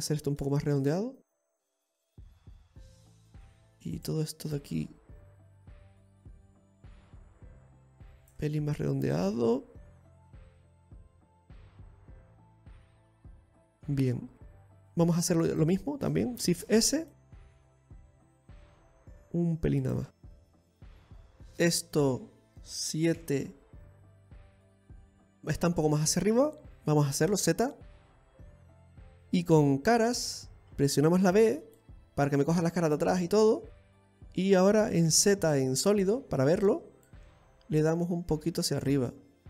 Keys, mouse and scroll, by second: 0.4 shift+right click, 0.9 middle click, 1.6 click, 2.4 scroll down 2, 2.6 middle click, 4.6 right click, 5.1 shift+right click, 6.6 click, 8.0 click, 9.3 middle click, 10.7 right click, 11.2 shift+right click, 12.1 middle click, 13.1 click, 14.2 middle click, 14.6 right click, 14.6 scroll up 1, 15.0 alt+shift+right click, 17.2 shift+s, 18.1 s, 20.8 scroll down 1, 20.9 scroll up 4, 21.4 middle click, 23.8 KP_7, 24.7 KP_1, 28.0 z, 31.0 click, 31.9 b, 35.6 z, 37.7 click.